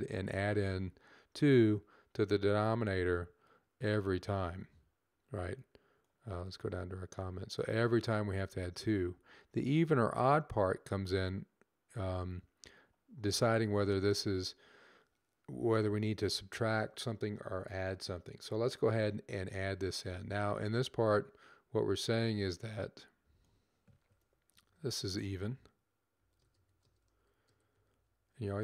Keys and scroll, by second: 23.6-28.3 typing.